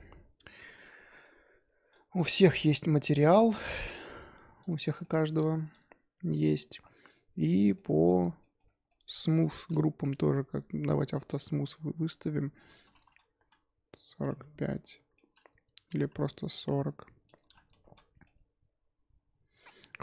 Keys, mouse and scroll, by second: 1.1 click, 1.9 click, 2.1 click, 2.6 click, 3.1 click, 3.5 click, 3.8 click, 4.6 click, 5.0-5.7 shift+middle drag, 5.7 click, 7.0 click, 7.7-8.6 shift+middle drag, 8.6 scroll up 3, 8.9-11.2 middle drag, 11.2 click, 11.8-12.7 scroll up 2, 12.7-14.2 drag, 14.2-16.5 middle drag, 16.5 click, 17.2 click, 18.2-20.0 middle drag.